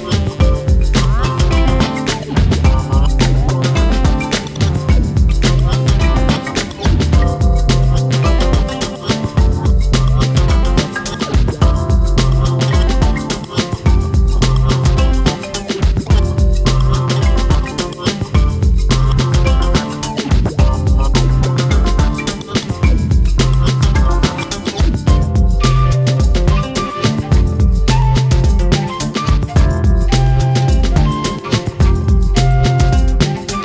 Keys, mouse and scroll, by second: 0.5 shift+d, 2.0 r, 2.7 s, 4.0 click, 4.3 l, 4.6 g, 5.3 click, 5.5 l, 5.8 KP_1, 6.3 shift+middle click, 6.8 s, 7.8 shift+middle click, 8.2 click, 10.2 shift+middle click, 10.5 alt+/, 10.8 click, 11.3 l, 11.6 click, 12.5 click, 12.9 l, 13.2 click, 14.3 click, 14.6 l, 14.8 click, 16.1 r, 16.7 click, 17.5 click, 17.8 l, 18.2 r, 18.7 click, 19.5 click, 20.8 click, 21.5 click, 21.7 l, 22.0 r, 22.7 alt+/, 22.7 scroll down 3, 22.9 middle click, 23.7 Tab, 23.8 drag, 24.0 scroll down 2, 24.1-24.9 middle drag, 24.9-25.2 scroll up 4, 25.2 click, 26.1 ctrl+a, 26.9 click, 28.8-29.8 drag, 31.1-32.1 right drag, 32.1-32.6 drag, 33.3 scroll down 2, 33.5-33.6 middle drag.